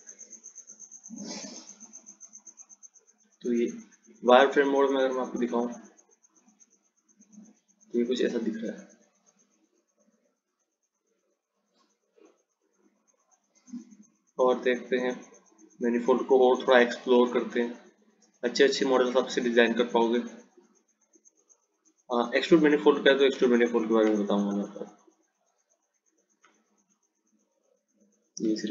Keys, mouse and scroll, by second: 1.4 click, 7.5 click, 9.5 click, 13.2 click, 14.0 click, 16.2 click, 24.6 ctrl+click, 27.1 click.